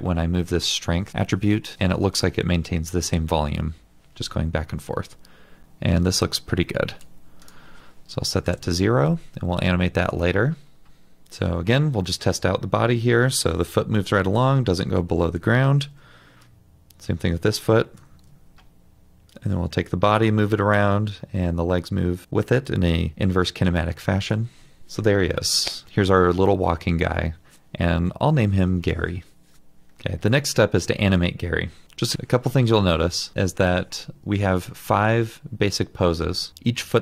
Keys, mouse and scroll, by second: 8.5 Return, 15.8 ctrl+z, 18.1 ctrl+z, 24.5 ctrl+z.